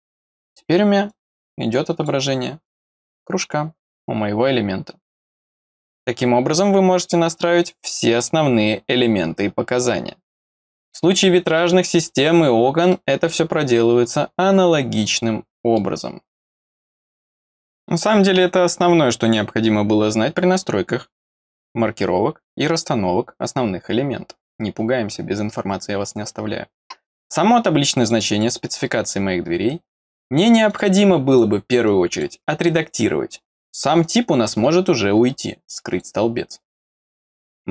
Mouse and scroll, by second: 0.4 click, 1.0-2.0 drag, 2.6 click, 7.7 scroll down 1, 8.2-11.4 middle drag, 12.9 middle click, 15.1 middle click, 28.0 click, 28.3 click, 28.5 click, 30.7 click, 31.3 click, 31.8 click, 34.0-36.0 drag, 34.5 right click, 37.2 click.